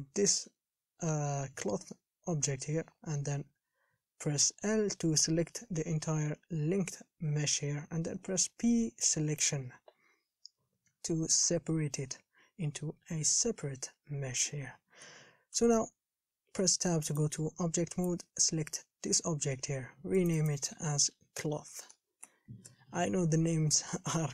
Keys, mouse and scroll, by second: 0.7 l, 9.6 p, 10.7-11.1 scroll down 1, 11.1-14.2 middle drag, 15.8 Tab, 17.4 click, 18.3 click, 20.6-24.3 drag.